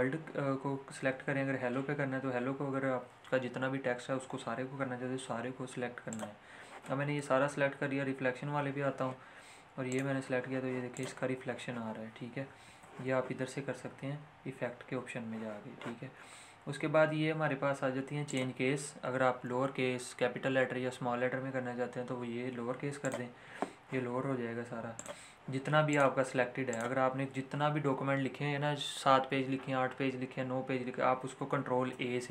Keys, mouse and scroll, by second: 6.2 click, 9.0-10.0 scroll down 1, 10.0 click, 12.8 ctrl+z, 18.4 click, 23.0 click, 31.5 click, 31.8 a.